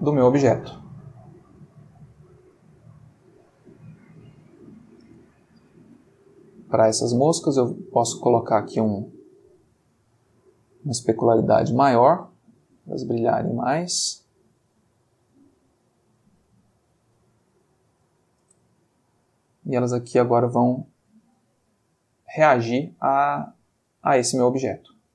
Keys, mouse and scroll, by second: 5.0 space, 7.6 click, 8.4 click, 9.4-10.3 middle drag, 12.1-14.0 drag, 18.4 space, 25.0 click.